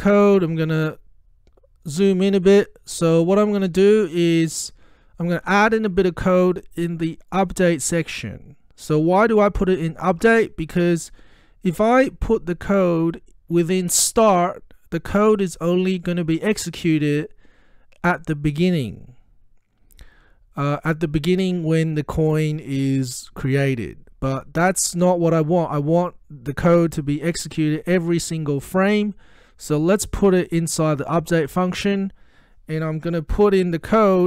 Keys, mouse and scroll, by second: 0.0-1.6 ctrl+scroll up 2, 1.6-2.3 ctrl+scroll up 1, 2.3-3.4 scroll up 1, 7.3 click, 14.0 click, 30.2 click, 30.3 click.